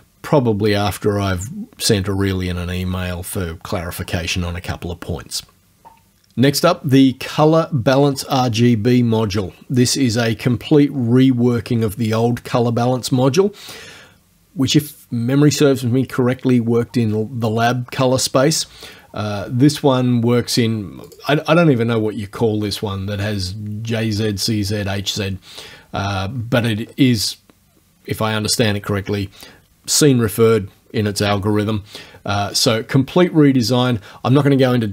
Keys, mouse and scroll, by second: 21.1 click, 26.4-27.0 scroll up 1.